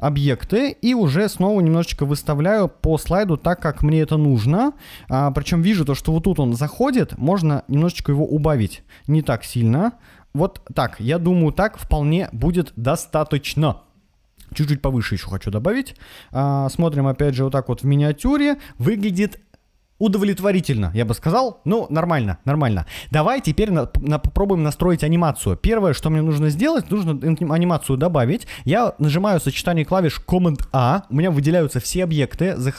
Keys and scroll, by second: 0.4 Up, 0.5 Left, 1.1 Up, 1.9 Left, 2.4 Up, 3.2 Left, 3.6 Up, 14.9 Up, 30.5 super+a.